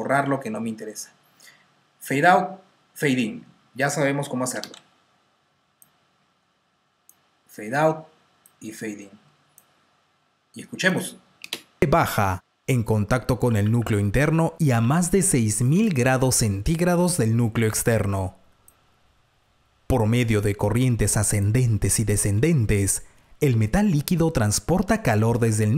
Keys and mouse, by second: 4.4 F6, 5.3 F7, 6.2 click, 11.3 space, 13.3-13.6 typing, 15.8 click, 15.8-16.3 typing, 16.3 click, 18.3-19.0 typing, 18.5 click, 22.3 F2.